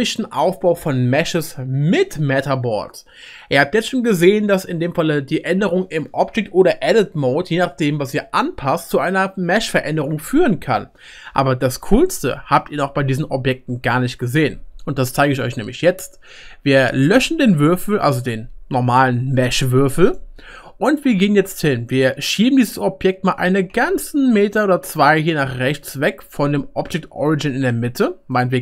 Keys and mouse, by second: 5.3-12.0 middle drag, 17.1 x, 23.4 g.